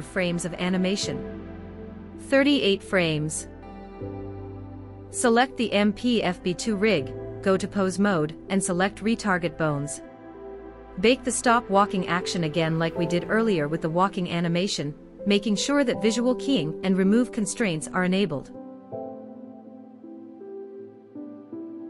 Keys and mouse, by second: 0.7 Right, 0.9 Right, 1.2 Right, 4.1 click, 6.1 click, 7.4 ctrl+Tab, 12.9-16.6 drag.